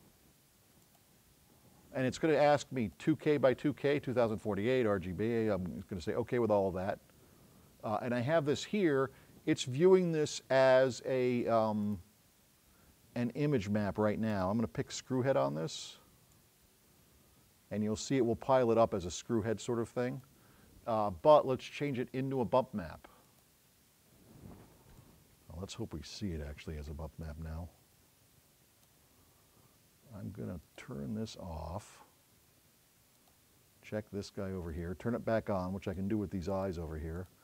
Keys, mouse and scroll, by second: 0.9 click, 16.7-20.4 drag, 21.8 right click, 23.3 click.